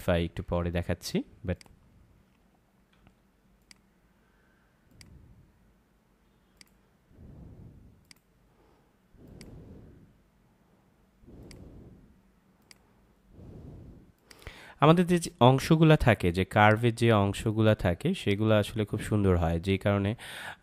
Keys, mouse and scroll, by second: 0.5 ctrl+z, 1.5 click, 2.9 ctrl+z, 3.6 click.